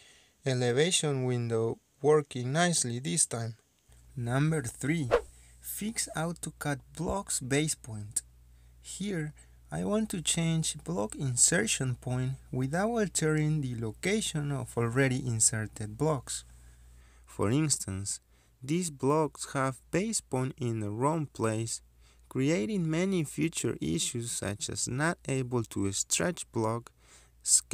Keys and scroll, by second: 7.2 Escape, 23.0 ctrl+z, 25.1 s, 25.2 space.